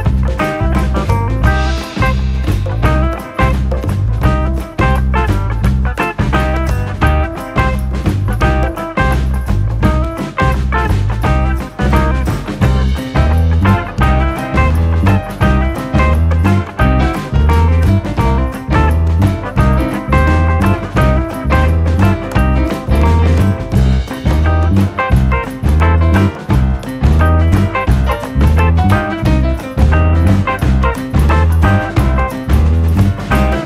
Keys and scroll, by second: 22.9 0, 23.1 ., 23.5 2.